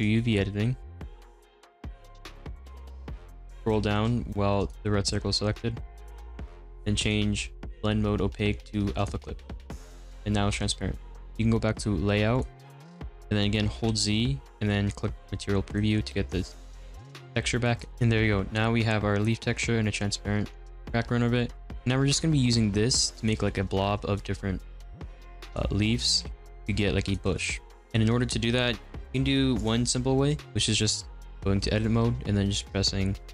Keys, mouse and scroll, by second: 9.2 click, 10.0-12.3 middle drag, 12.3 click, 12.9-15.9 middle drag, 15.9 z, 16.3-17.7 middle drag, 17.7 click, 17.9-21.9 middle drag, 21.9 click, 22.4 r, 23.4 ctrl+z, 24.1-25.9 middle drag, 25.9 shift+d, 27.2 x, 27.7 middle drag, 27.8 click, 30.3 click, 30.7 middle click, 31.0 a.